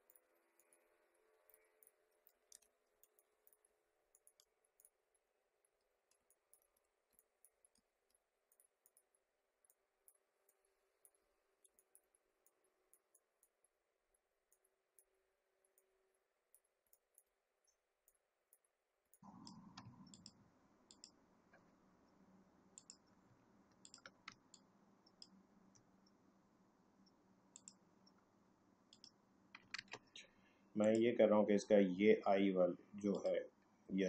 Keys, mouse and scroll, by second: 0.0 click, 2.5 ctrl+z, 3.0 ctrl+click, 4.1 ctrl+click, 5.8 alt+scroll down 1, 6.2-7.3 typing, 6.2 click, 7.2 click, 7.8 alt+scroll up 1, 8.5-11.3 drag, 11.3 alt+scroll down 1, 11.7 space, 11.9 click, 12.0 space, 12.4-14.4 drag, 14.4-16.8 drag, 16.8 space, 16.9 click, 17.0 space, 18.0 click, 19.0 space, 19.1 click, 19.4 space, 20.1 shift+click, 24.2 space, 24.5 click, 24.9 space, 28.9 click, 29.8 ctrl+z, 30.8 click, 33.1 click.